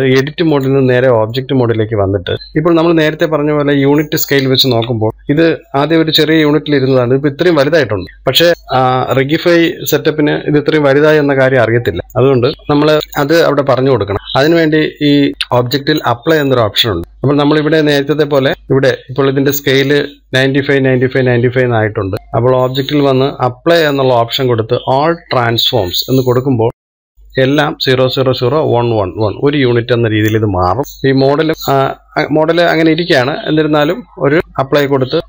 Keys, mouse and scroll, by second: 1.6-2.6 drag, 2.6 scroll up 1, 5.6 KP_1, 15.9-17.8 drag, 18.7 click, 23.7-26.8 drag, 31.3 click, 34.6-35.2 drag.